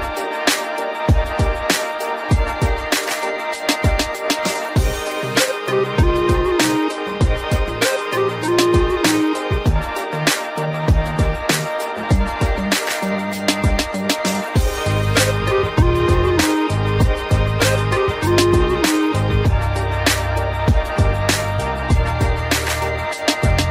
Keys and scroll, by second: 10.6 ctrl+0, 18.9 ctrl+t, 21.9 Return.